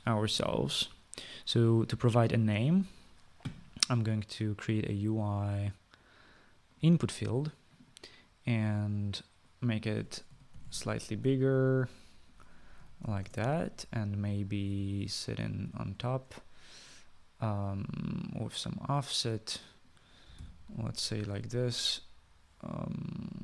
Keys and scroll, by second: 11.1-12.2 typing, 13.6-14.3 typing, 21.3 typing.